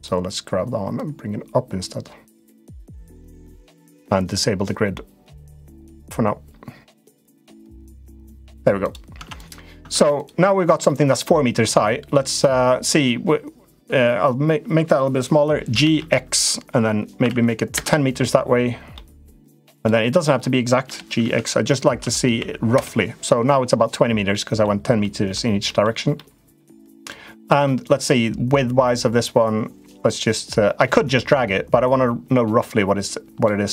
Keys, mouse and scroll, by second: 0.8-3.1 drag, 5.0 click, 5.4-7.5 drag, 7.9 click, 8.2 Tab, 8.9 Tab, 9.1 click, 9.6 Tab, 10.6 middle click, 12.2-13.6 drag, 15.4 g, 18.8 middle click, 19.5 click, 19.8 middle click, 20.6 g, 24.2 middle click, 24.9 middle click, 26.0 middle click, 26.8 click, 27.6-33.2 drag.